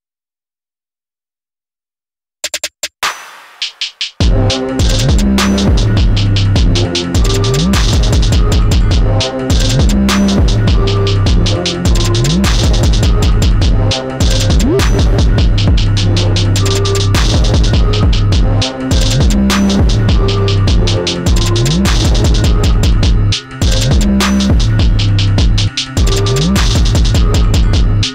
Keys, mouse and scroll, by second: 0.0 space, 0.9-7.9 alt+drag, 7.9 space, 8.1 click, 8.5 space, 10.2-13.4 alt+drag, 16.5 ctrl+j, 19.4 click, 27.8 click.